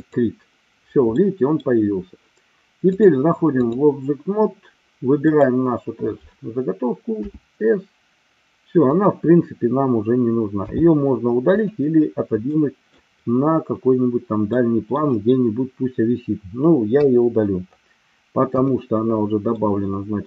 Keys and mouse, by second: 0.0 click, 1.1 middle click, 3.0 click, 5.3 click, 8.9 click, 11.6 click, 12.5 middle click, 14.6 middle click, 16.9 Delete, 18.5 KP_1, 19.5 middle click.